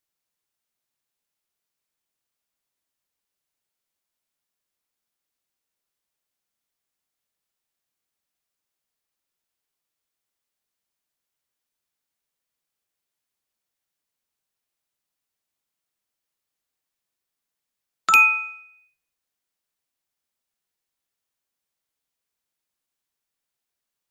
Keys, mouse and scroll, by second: 6.4 ctrl+0, 11.4 ctrl+-, 13.4 ctrl+0.